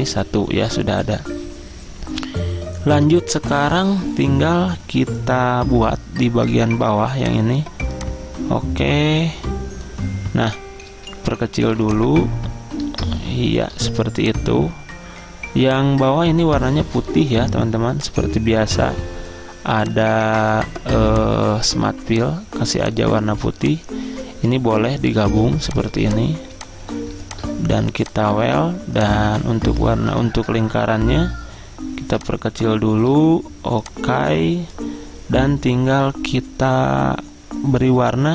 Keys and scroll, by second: 30.2 ctrl+Home.